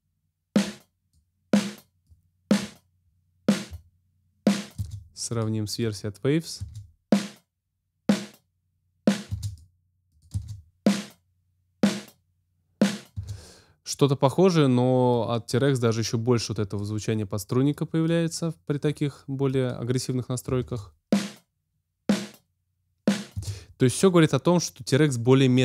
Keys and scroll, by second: 4.7 space, 6.5 space, 9.2 space, 13.1 space, 20.5 space, 23.3 space.